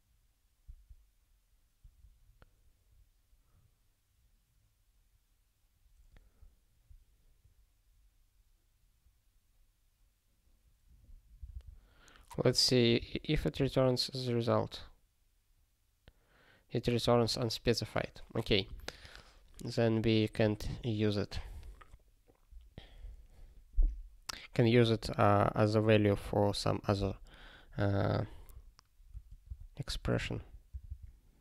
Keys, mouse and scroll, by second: 11.5 super+b, 13.0 ctrl+e, 29.1 super+o, 29.4 super+b, 30.1 ctrl+g.